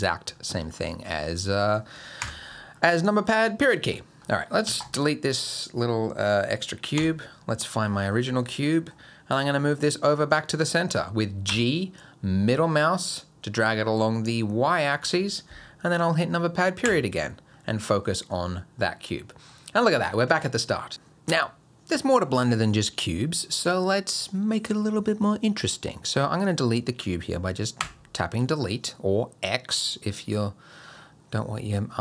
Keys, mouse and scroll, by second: 0.0-0.7 scroll down 7, 0.5 middle click, 1.5 click, 2.2 KP_Decimal, 2.7-3.7 scroll down 8, 3.0 middle click, 3.7 middle click, 4.3 middle click, 4.7 x, 5.4 click, 7.0 KP_Decimal, 7.5-9.9 scroll down 15, 7.8 middle click, 8.6 middle click, 9.9-10.5 scroll down 1, 11.5 g, 16.8 KP_Decimal, 17.5-19.2 scroll down 10, 18.0 middle click, 18.8 middle click, 27.8 Delete.